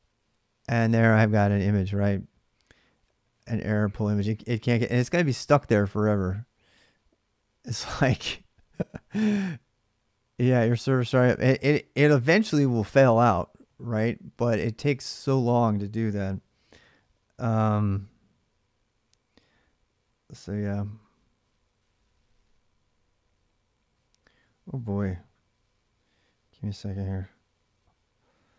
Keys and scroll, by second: 4.5 alt+Tab, 7.8 alt+Tab.